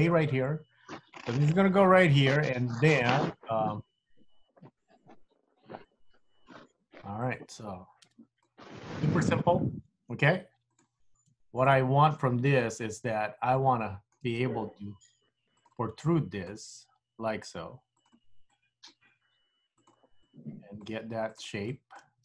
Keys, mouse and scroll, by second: 8.5 middle click, 10.8 click, 11.7 shift+click, 12.7 KP_3, 13.3 scroll up 3, 13.9 shift+middle click, 14.8 g, 16.1 click, 16.7 g, 18.5 click, 19.1 g, 20.2 click, 21.0 g, 21.8 click, 22.1 g.